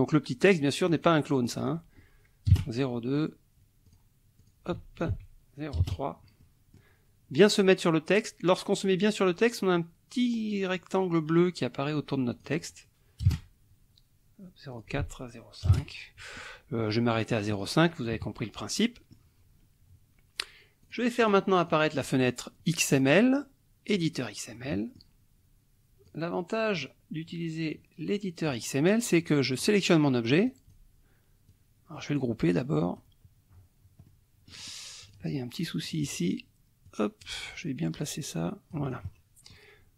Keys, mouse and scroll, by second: 0.9 click, 1.4 click, 2.5 KP_0, 3.8 click, 4.4 click, 5.1 ctrl+a, 5.8 KP_3, 6.4 click, 12.3 click, 13.3 KP_0, 14.7 ctrl+click, 15.0 ctrl+a, 15.7 KP_0, 15.8 KP_5, 17.3 click, 18.1 KP_Subtract, 18.8 click, 20.8 click, 21.2 click, 21.6 click, 22.9 click, 23.9 click, 24.5 click, 26.1 click, 27.7 click, 29.6 click, 30.5 click, 31.5-33.2 drag, 34.1 click, 35.1 click, 35.9 click, 36.9 click, 37.9-39.7 drag.